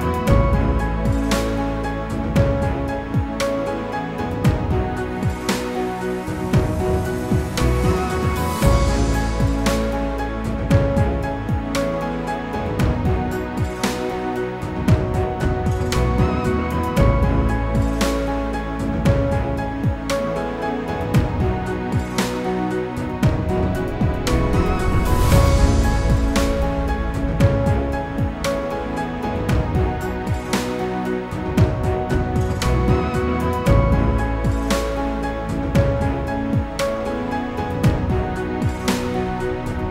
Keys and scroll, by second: 9.2 ctrl+c, 9.8 ctrl+f, 36.0 ctrl+c, 36.6 ctrl+f.